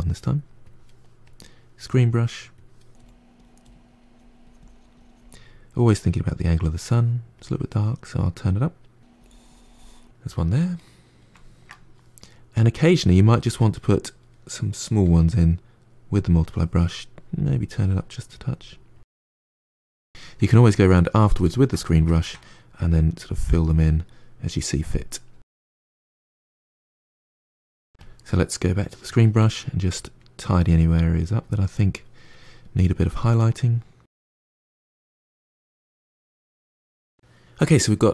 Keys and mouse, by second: 1.1-2.9 drag, 2.9 f, 3.6 f, 4.1 click, 5.0-9.9 drag, 9.9-12.4 middle drag, 12.4-13.8 drag, 13.8-14.9 middle drag, 14.9 f, 15.6-19.2 drag, 19.2 middle click, 19.5 click, 19.7 middle click, 20.1 click, 20.4 middle click, 20.6 click, 20.8 middle click, 21.3 click, 21.7-22.8 middle drag, 22.8-24.3 drag, 24.3 middle click, 24.7 g, 24.8 click, 25.1 f, 25.2 middle click, 25.7-27.0 drag, 27.0 f, 27.2-28.4 drag, 28.4 middle click, 28.5 f, 28.8 click, 29.2 middle click, 29.4 click, 29.5 middle click, 29.9 click, 30.4 middle click, 31.0 click, 31.1 middle click, 31.4-32.7 drag, 32.7-34.0 middle drag, 34.0 click, 34.3 middle click, 34.5 click, 35.0 middle click, 35.3 click, 35.6 middle click, 36.0 click, 36.4-38.1 ctrl+middle drag.